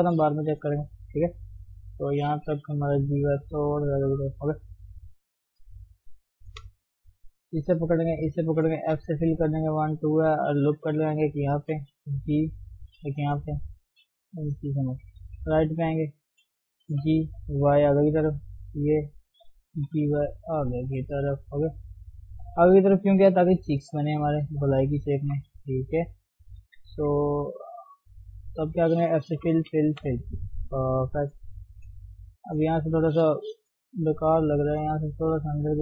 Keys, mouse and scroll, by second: 0.7 g, 1.9 click, 2.6 g, 5.4-6.5 middle drag, 6.5 KP_1, 6.8-7.3 scroll up 1, 7.3 click, 9.0 f, 10.8 ctrl+r, 12.0 g, 13.3 ctrl+r, 14.3 g, 15.2 KP_3, 17.0 g, 18.6 Left, 19.1 Left, 19.8 g, 21.3 scroll down 1, 21.4-23.3 middle drag, 23.3 g, 25.2 click, 25.7 g, 26.6 KP_1, 27.0 KP_3, 27.3 scroll up 1, 28.3 click, 29.4 f, 29.7 f, 30.0 f, 30.2 scroll down 1, 30.4 middle click, 31.3-31.7 scroll up 1, 31.7 KP_3, 31.9-32.3 scroll up 1, 32.3 click, 32.5-33.7 scroll down 1, 33.7 g, 34.8 click, 35.0 g.